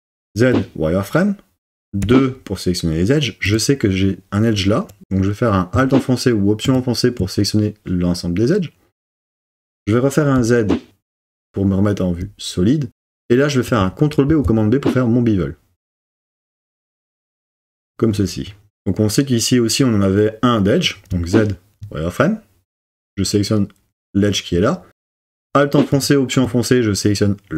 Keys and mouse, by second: 2.0 2, 6.7 alt+click, 10.4 z, 14.3 super+b, 17.8 click, 21.1 z.